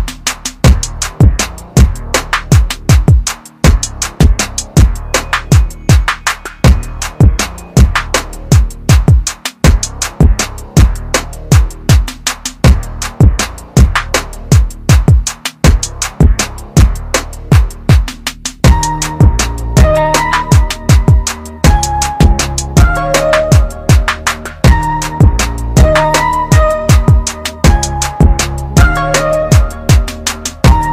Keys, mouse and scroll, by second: 4.1 ctrl+click, 11.9 click, 17.2 click, 30.3 z.